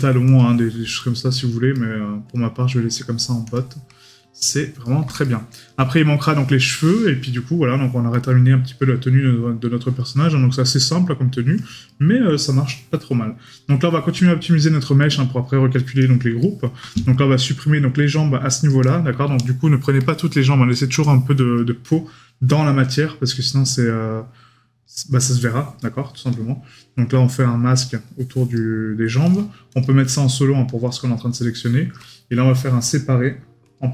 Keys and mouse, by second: 4.8 right click, 11.9 right click, 16.4 right click.